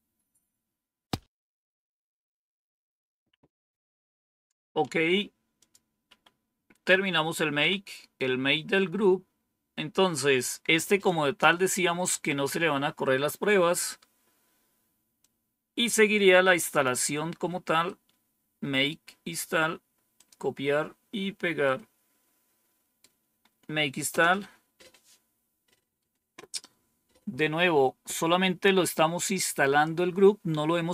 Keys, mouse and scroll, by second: 5.5 click, 7.5 End, 8.4-9.3 scroll down 1, 15.1-16.8 drag, 17.7-18.7 right drag, 20.0 click, 21.5-22.9 right drag, 24.0 Return.